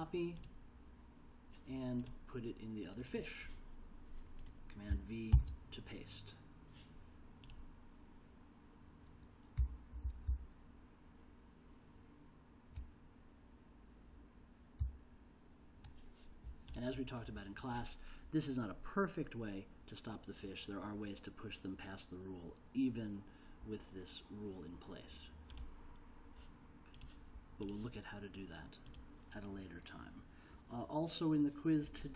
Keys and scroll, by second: 5.5 super+v, 9.7 j, 10.4 l, 15.0 j.